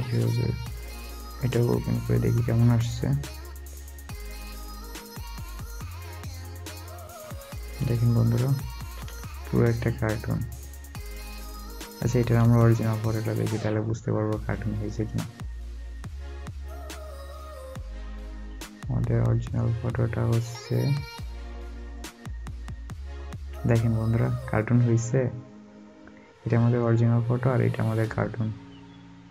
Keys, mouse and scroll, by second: 1.1 space, 3.6 space, 3.6 double click, 8.0 alt+scroll up 1, 8.5-8.8 alt+scroll up 2, 10.1 alt+scroll down 1, 20.7 alt+scroll down 1, 20.8 double click, 29.1 alt+scroll, 29.2 alt+scroll up 1.